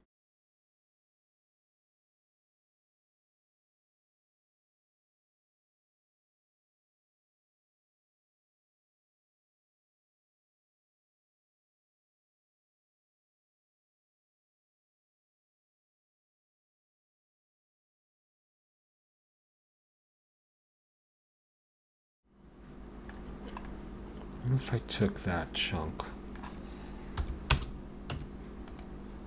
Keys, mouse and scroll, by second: 0.5 Tab, 0.7 click, 0.8 Tab, 0.9 middle click, 1.1 Tab, 1.3 h, 1.4 click, 1.6 middle click, 2.7 c, 4.7 middle click, 5.0-5.8 scroll up 4, 5.1 shift+middle click, 5.7 c, 6.9 scroll down 2, 7.0 shift+middle click, 7.2-7.5 scroll up 2, 7.5 v, 8.3 c, 9.0 middle click, 9.3 middle click, 9.5 shift+middle click, 9.6 shift+middle click, 9.7 middle click, 10.3 c, 14.3 scroll down 3, 14.4 middle click, 14.7 middle click, 15.7 scroll up 2, 16.0 c, 20.4 middle click, 20.7 scroll down 1, 20.7 middle click, 21.1 shift+click, 21.3 middle click, 21.5 middle click, 21.7 middle click, 22.5 scroll down 3, 23.2-24.6 scroll down 3, 23.6 middle click, 27.2 p, 28.1 Tab, 28.7 click.